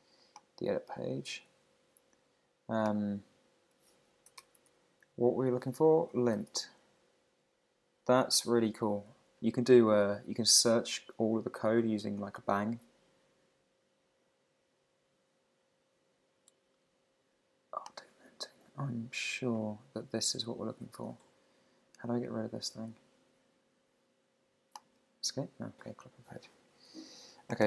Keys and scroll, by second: 4.4 shift+1.